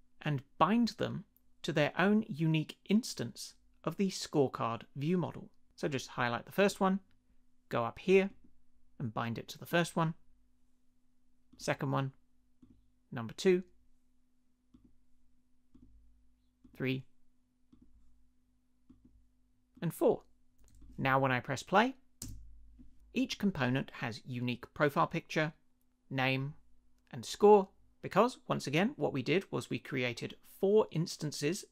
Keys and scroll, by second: 22.2 space.